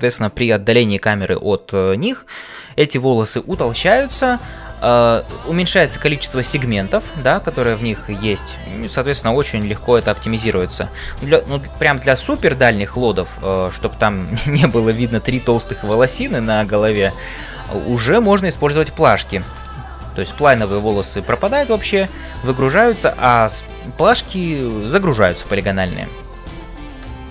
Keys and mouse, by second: 0.0-27.3 typing, 9.9 click.